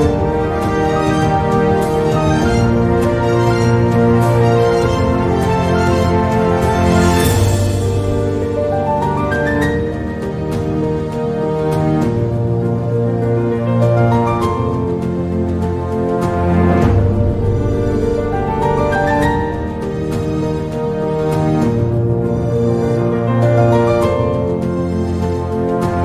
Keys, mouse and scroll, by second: 1.9 e, 5.1 click, 6.1 click, 7.7 e, 11.5 e, 13.9 s, 18.5 click, 20.2 e, 24.0 e.